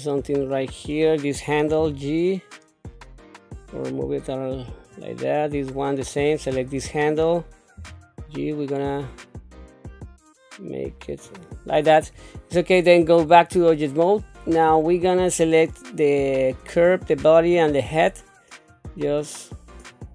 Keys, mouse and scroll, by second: 0.2 click, 1.8 g, 4.9 click, 6.6 click, 7.7 g, 13.2 Tab, 14.6 shift+middle click, 18.7 click, 18.9-20.1 drag.